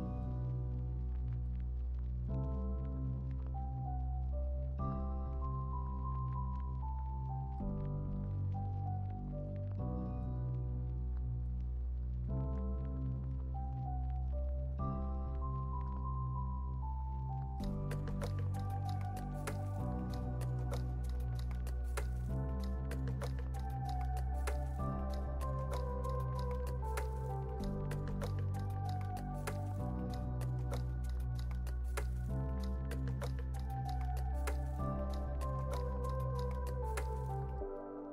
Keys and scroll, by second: 6.0 super+s, 20.8 super+c, 21.1 super+v, 21.4 super+s, 26.1 super+c, 27.3 super+v, 27.9 super+s, 29.0 space.